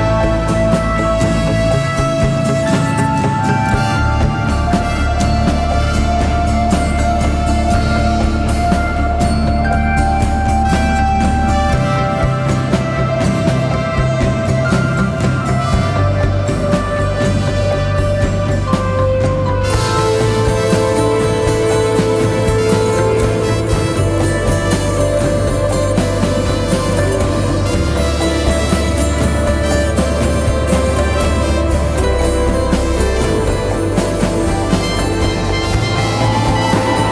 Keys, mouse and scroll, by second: 8.2 ctrl+t, 9.4 alt+shift+click, 12.6 alt+s, 13.3 ctrl+click, 18.1 right click, 21.3 Return, 30.9-33.4 scroll down 1.